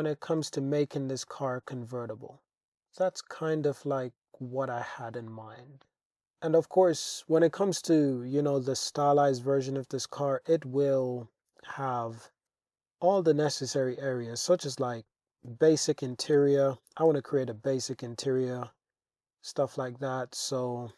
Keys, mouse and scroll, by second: 0.1 click, 0.4 Tab, 1.3 click, 1.7-2.9 middle drag, 3.3 shift+drag, 4.1 shift+click, 4.9 middle click, 6.1-7.7 middle drag, 8.7 shift+drag, 9.7 click, 10.5 Tab, 11.1 alt+z, 12.0 click, 12.4 alt+z, 13.2 g, 13.5 z, 14.3 click, 14.9 alt+z, 15.1 click, 15.6 alt+z, 16.1 g, 16.4 z, 16.8 click, 17.1 Tab, 17.6 Tab, 17.9 alt+z, 18.1 click, 18.9 g, 20.0 click.